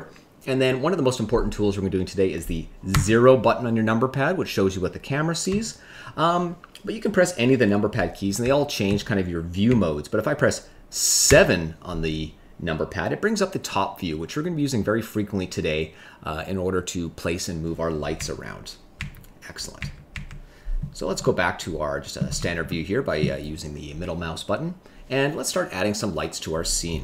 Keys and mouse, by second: 2.9 KP_0, 5.4 KP_0, 8.4 KP_1, 8.8 KP_3, 9.6 KP_9, 11.2 KP_7, 18.1 KP_9, 18.9 KP_9, 19.7 KP_9, 20.1 KP_9, 21.2 middle click, 22.6 shift+middle click.